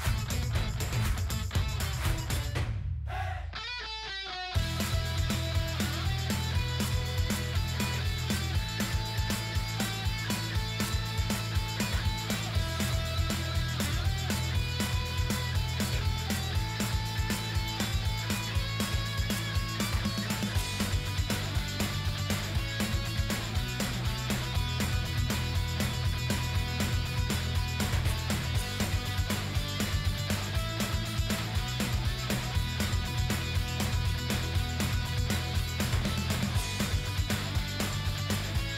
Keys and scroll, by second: 19.9 ctrl+g, 21.8 shift+l, 33.3 ctrl+d.